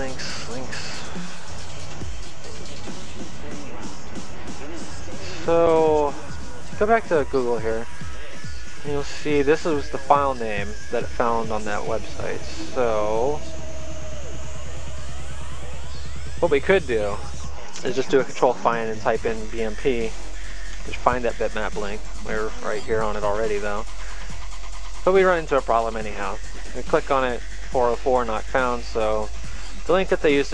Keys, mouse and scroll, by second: 3.0 click, 6.3 click, 10.9 click, 12.3 click, 14.4 click, 18.1 ctrl+f, 20.8-21.9 typing, 24.1 click, 28.6 click.